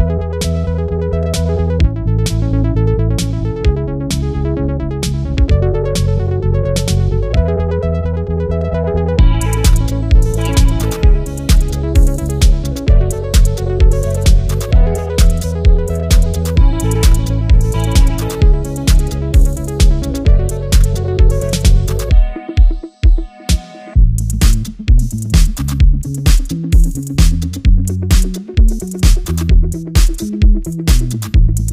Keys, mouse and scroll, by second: 4.4 ctrl+z, 7.4 ctrl+z, 8.4 ctrl+z, 10.1 ctrl+z, 12.4 ctrl+z, 22.7 ctrl+z, 26.9 ctrl+z.